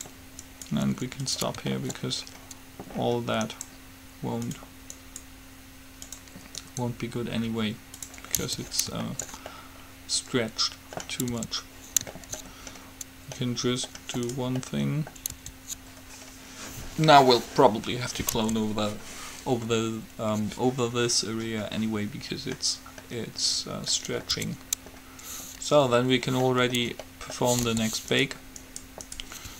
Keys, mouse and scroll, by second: 1.9 middle click, 3.7-5.3 right drag, 8.7 Tab, 11.7 Tab, 14.5-16.1 drag, 15.7 Tab, 18.7 Tab, 24.5 Tab, 27.9 g, 28.7 click, 29.1-29.5 right drag.